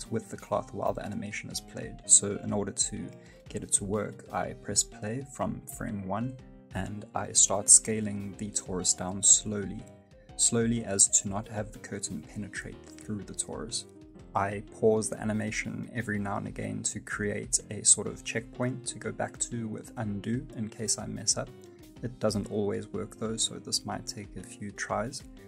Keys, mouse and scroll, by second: 0.2-0.6 scroll down 2, 0.6-1.8 scroll up 2, 1.0 space, 2.5 right click, 2.9 right click, 3.3 right click, 3.6 s, 11.1 space, 11.4 space, 12.0 s, 16.0 space, 16.1-16.4 scroll up 2, 16.3 middle click, 16.7 shift+middle click, 17.1 space, 17.8 g, 20.4 middle click, 21.2 g.